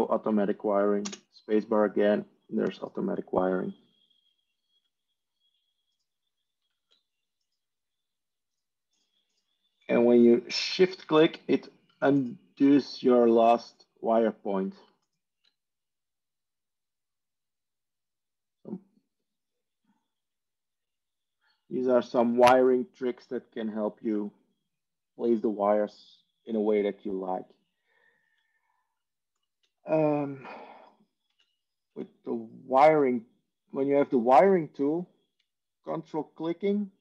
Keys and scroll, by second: 9.1 Tab, 29.7 Tab, 31.2 Tab, 32.1 Tab.